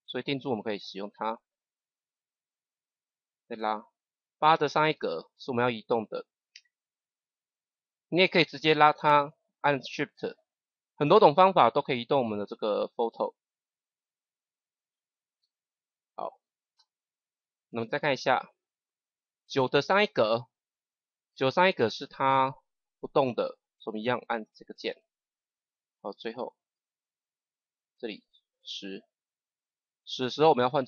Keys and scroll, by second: 4.8 Page_Up, 13.8 Right, 14.7 Left, 15.3 Right, 20.2 Page_Up.